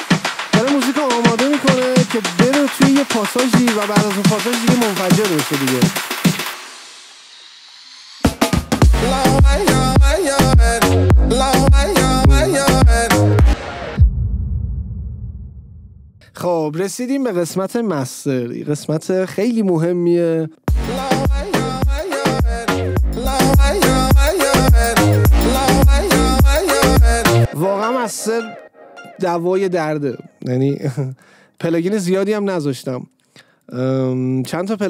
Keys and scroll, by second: 13.7 space, 20.8 space, 27.6 space.